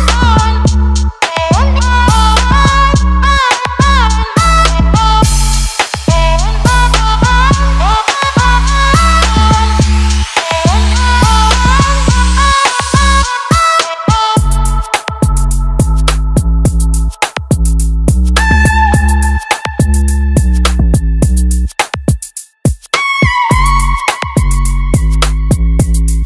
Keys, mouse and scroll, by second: 2.9 right click, 3.9 click, 8.9-10.6 alt+drag, 11.3 alt+click, 13.6-15.7 alt+drag, 16.4-19.2 alt+drag, 20.2 click, 24.7 shift+click.